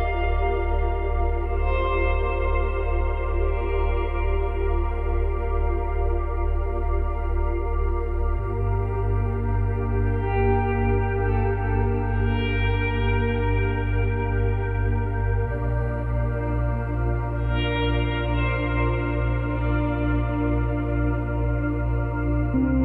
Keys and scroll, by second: 4.4 space, 6.7 space, 9.9 space, 12.5 space, 16.7 space, 18.6 space, 19.3 Delete, 21.2 space.